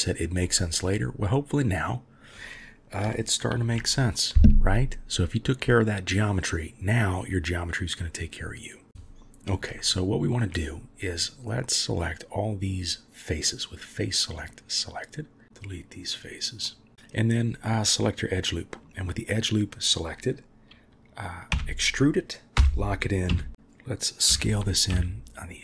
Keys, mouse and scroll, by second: 0.6 shift+middle click, 3.5 ctrl+r, 10.0-10.5 shift+middle drag, 11.2-12.7 drag, 13.8 click, 14.5 click, 18.0-19.1 middle drag, 23.3 s.